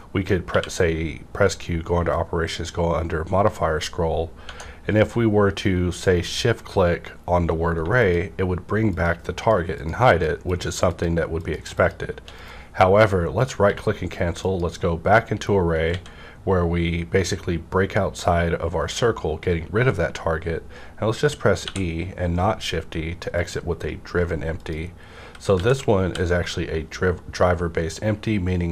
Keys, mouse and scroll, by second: 0.4 q, 2.1 click, 2.2 click, 3.2 scroll up 1, 4.4 Tab, 7.7 shift+Num_Lock, 7.8 Tab, 7.8 scroll up 1, 7.9 shift+click, 8.9 shift+click, 12.4 right click, 12.9 right click, 13.6 q, 14.4 click, 15.9 x, 15.9 click, 21.6 e, 21.6 x, 23.4 click, 24.5 click, 25.2-27.3 typing.